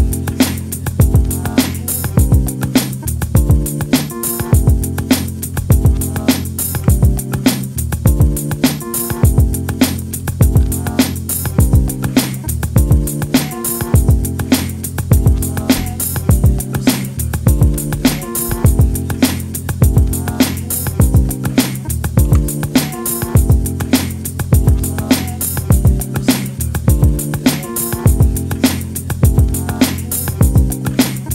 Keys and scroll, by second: 10.4 alt+shift+Up, 15.1 Down, 17.8 Up, 18.0 Up, 21.2 space.